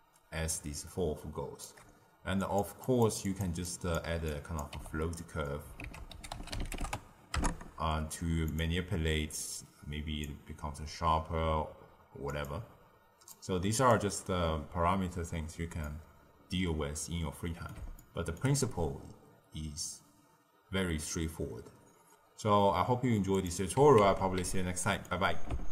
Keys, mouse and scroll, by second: 2.7 click, 3.2 click, 3.6 click, 4.2 drag, 4.7 g, 5.7 ctrl+a, 9.2-15.7 drag, 15.7-20.0 middle drag, 20.0-21.0 scroll down 1, 21.0-21.6 scroll down 2, 21.6-23.3 scroll down 5, 23.3 click, 24.0 ctrl+x, 24.5-25.7 ctrl+middle drag.